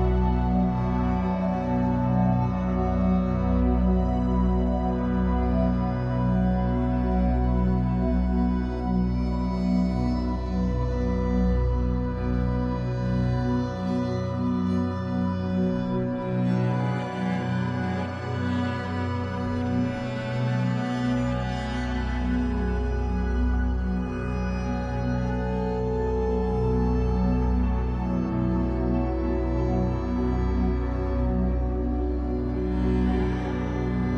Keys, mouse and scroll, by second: 1.2 scroll up 2, 1.7-2.5 scroll up 2, 2.5-7.4 drag, 7.0-7.4 scroll down 1, 7.4-11.0 middle drag, 8.2 scroll up 1, 8.7 scroll up 1, 10.1-10.9 scroll up 1, 11.0-16.3 drag, 16.1 scroll down 1, 16.3-18.2 middle drag, 17.0-17.4 scroll up 1, 18.2-23.1 drag, 22.8-23.1 scroll down 1, 23.1-26.0 middle drag, 23.9-24.5 scroll up 4, 24.9-26.0 scroll up 2, 26.0-32.6 drag, 32.3-32.6 scroll down 2, 32.6-34.1 middle drag, 33.5-34.1 scroll up 6.